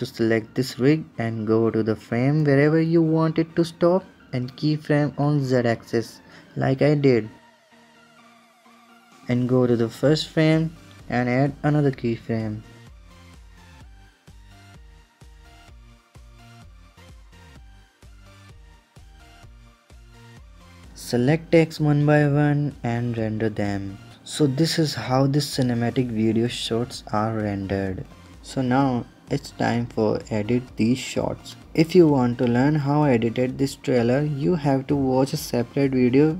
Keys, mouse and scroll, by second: 1.6 click, 4.7 click, 6.2-11.2 drag, 11.2-13.0 middle drag, 13.0 click, 14.4-16.7 drag, 16.9-20.0 drag, 20.5 click, 21.2 ctrl+KP_0, 22.3-25.3 drag, 29.0 KP_0, 30.5 middle click, 31.4 scroll down 1, 31.5-33.7 middle drag, 33.7-34.7 scroll down 2, 34.7-36.3 middle drag.